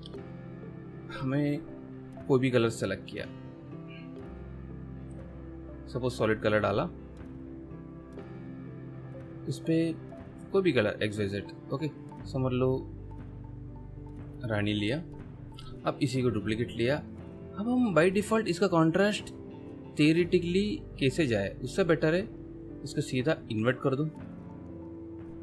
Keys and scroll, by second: 1.4 m, 15.9 v.